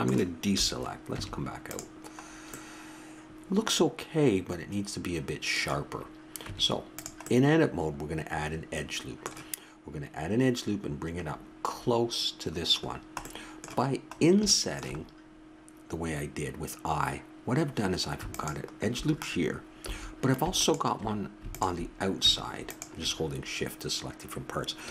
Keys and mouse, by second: 0.5 a, 1.1 Tab, 5.1 middle click, 6.5 Tab, 7.8-8.8 middle drag, 9.0-10.2 middle drag, 11.2-17.0 middle drag, 18.3-20.2 drag, 19.8 a, 20.6-24.9 drag.